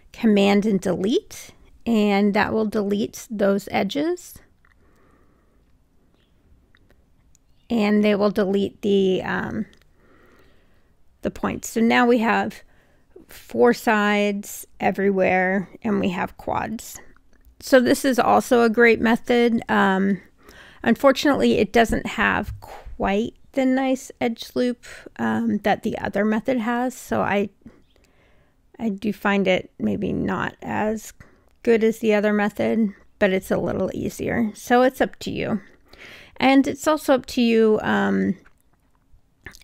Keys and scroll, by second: 0.0 super+BackSpace, 4.5 Caps_Lock, 8.9 r, 12.1 w.